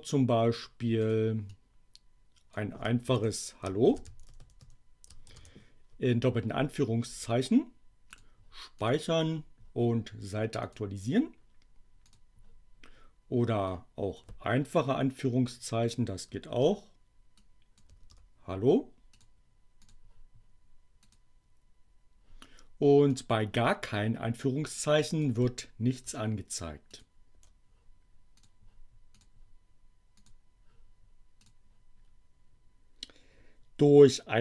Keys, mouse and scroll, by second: 1.0 click, 1.4-2.6 drag, 3.0-5.2 typing, 7.0 space, 8.1 click, 8.8 click, 10.6 click, 12.1 click, 13.6 click, 17.4 click, 19.0 click, 19.8 click, 20.9 click, 23.0 click, 24.7 click, 25.9 BackSpace, 26.8 click, 27.3 BackSpace, 28.3 click, 29.1 click, 30.2 click, 31.5 click.